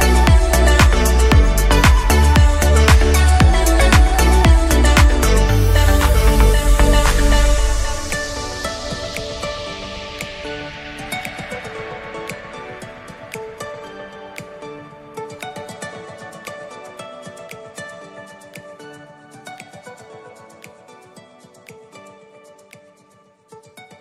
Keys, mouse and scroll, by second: 5.7 click, 6.3-6.6 scroll up 1, 6.6-8.8 middle drag, 8.8-9.8 scroll down 5, 9.8-12.8 drag, 14.1-15.7 drag, 15.7-18.3 right drag, 18.3-20.1 drag, 20.3-21.0 middle drag, 21.0 scroll down 2, 21.2-21.9 middle drag, 21.9 click, 22.9 s, 23.9 middle click.